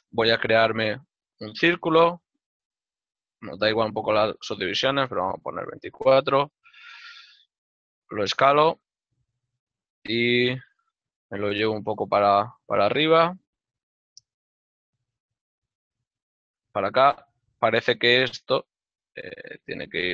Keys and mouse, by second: 4.7 KP_2, 5.0 Return, 13.0 g, 16.6 ctrl+middle click, 18.4 right click, 19.1 l.